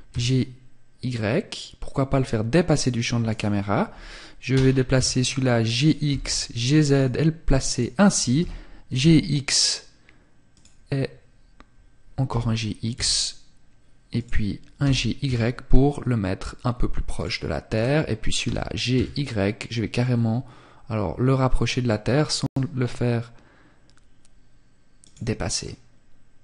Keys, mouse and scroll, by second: 1.9 click, 2.4 right click, 3.6 g, 4.9 click, 5.2 g, 6.0 click, 6.8 right click, 7.4 g, 9.7 click, 13.3 click, 13.9 g, 16.3 click, 16.8 right click, 17.5 g, 24.1 click, 24.6 middle click.